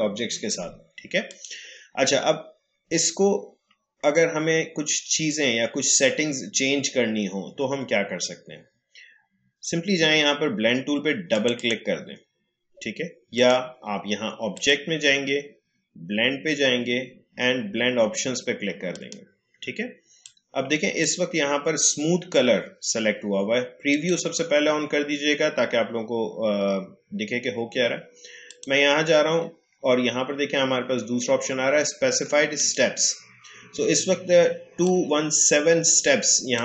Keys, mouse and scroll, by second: 1.2 click, 11.3 click, 18.9-23.4 drag, 23.8 click, 28.4 click, 32.5-36.6 drag.